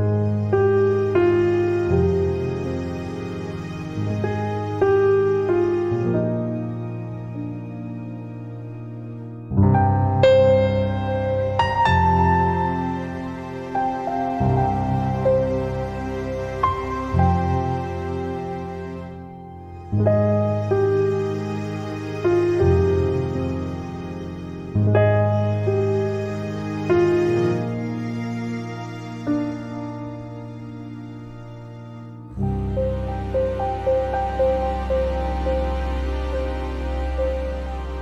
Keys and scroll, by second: 1.9 ctrl+z.